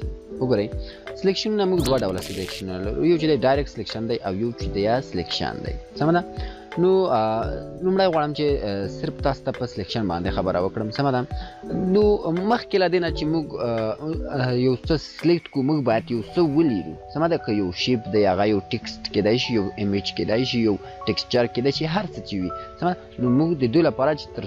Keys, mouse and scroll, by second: 2.3 click, 2.4 click, 7.7 click, 11.7 click.